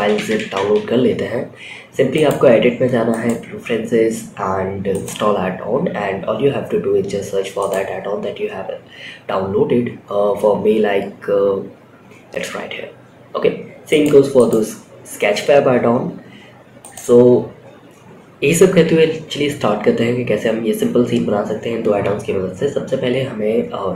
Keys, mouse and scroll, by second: 1.4-2.7 drag, 18.1 a, 23.5 x.